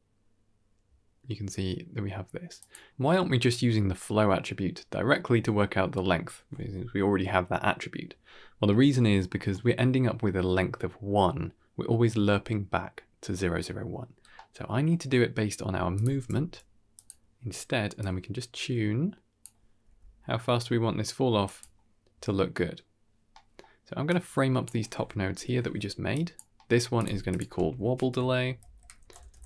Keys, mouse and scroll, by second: 2.6 middle click, 2.6-3.3 scroll down 5, 5.0 middle click, 8.5 middle click, 9.0-9.5 scroll up 4, 9.4 middle click, 14.0-14.5 scroll down 3, 14.2 middle click, 14.8 middle click, 15.8 click, 16.1 g, 17.9-19.3 drag, 19.7 g, 23.2-23.5 middle drag, 24.0 click, 24.7 middle click, 25.2 ctrl+j, 26.0 click, 26.4 middle click, 26.9 click, 27.2 click, 27.4 F2, 28.9 shift+b.